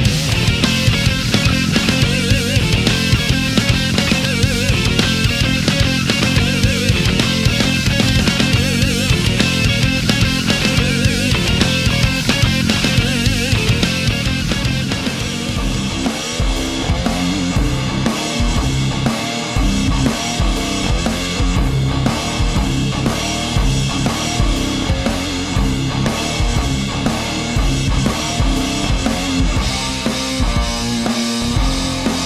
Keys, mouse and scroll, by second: 0.7 a, 2.8 click, 3.7 space, 5.2 space, 6.2 click, 6.7 space, 7.5 click, 8.7 click, 10.0 click, 10.7 Return, 12.2 click, 13.2 a, 14.8 right click, 15.5-17.5 drag, 17.8 a, 21.8 click, 23.5 space, 24.0 click, 25.0 click, 27.0 click, 27.8 Return, 29.7 click, 31.9 space.